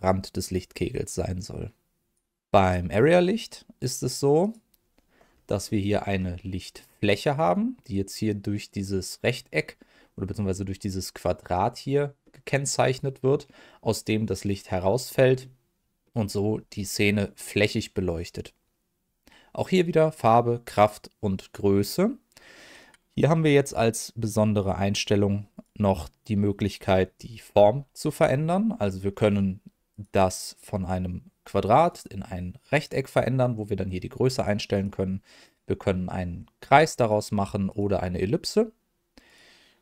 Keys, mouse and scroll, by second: 2.6 click, 4.4 click, 5.6 middle click, 6.1-6.4 scroll up 1, 6.4 middle click, 7.3 click, 9.9 middle click, 17.2 middle click, 25.5-28.2 drag, 28.5 middle click, 29.9-32.0 drag, 33.2-34.5 drag, 34.7-35.6 drag, 36.9-37.8 drag, 39.2-39.8 drag.